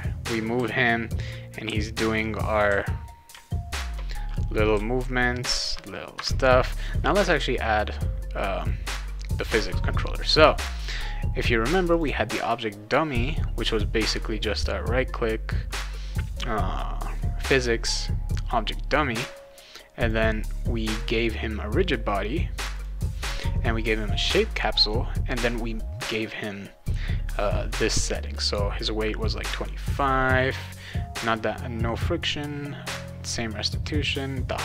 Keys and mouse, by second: 0.6 s, 1.6 d, 2.7 w, 4.7 s, 8.6 click, 10.4 click, 11.9 click, 14.0 click, 14.4 right click, 20.0 click, 20.9 click, 22.7 click, 24.2 click.